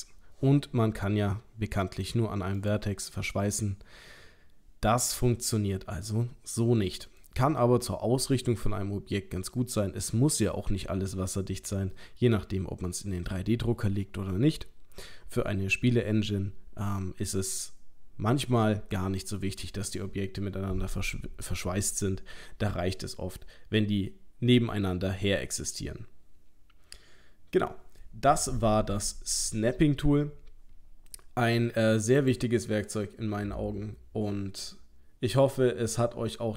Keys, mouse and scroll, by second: 3.4 middle click, 6.3 scroll down 1, 6.9 middle click, 6.9 scroll down 2, 7.4 scroll up 2, 11.9 middle click, 16.9 middle click, 32.2 click.